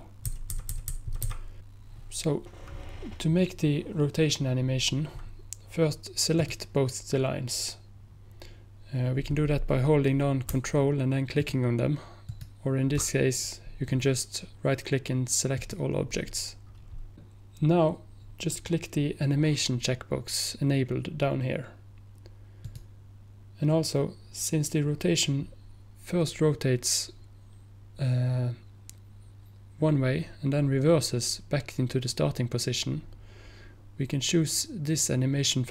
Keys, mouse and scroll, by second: 6.4 click, 8.4 click, 11.4 ctrl+click, 12.3 ctrl+click, 13.9 right click, 15.7 click, 22.7 click, 24.1 click.